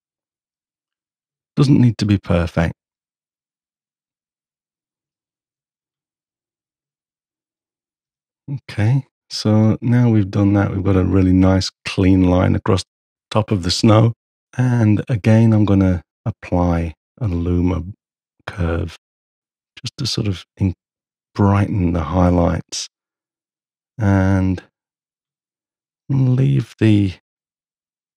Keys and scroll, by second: 8.0 h.